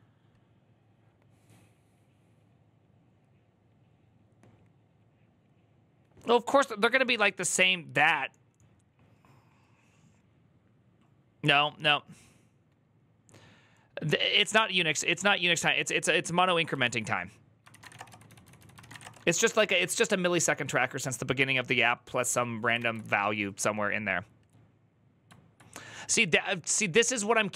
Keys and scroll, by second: 16.6 alt+{, 17.4-19.2 typing, 22.6 alt++.